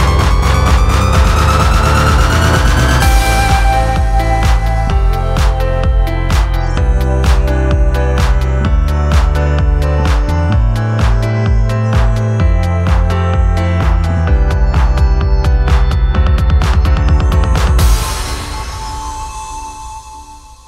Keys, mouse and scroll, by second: 18.3 ctrl+t.